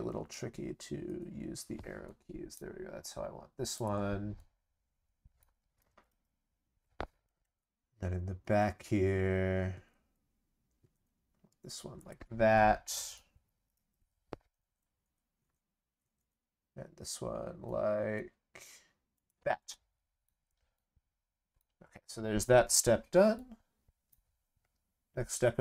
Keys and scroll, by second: 5.9 ctrl+c, 6.1 ctrl+v, 13.5 ctrl+c, 13.7 ctrl+v.